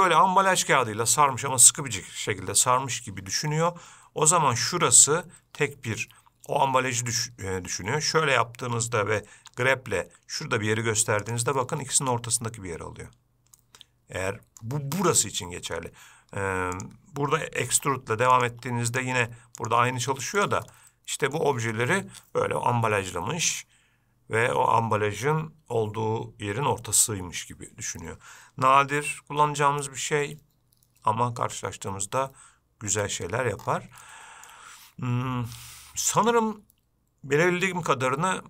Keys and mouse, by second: 7.5-8.7 middle drag, 9.7 g, 11.9 middle click, 13.9-14.9 middle drag, 15.9 g, 18.0 e, 18.8 e, 21.0 middle click, 29.4 middle click, 33.2 Tab, 34.4-34.8 shift+middle drag, 36.5-38.4 drag.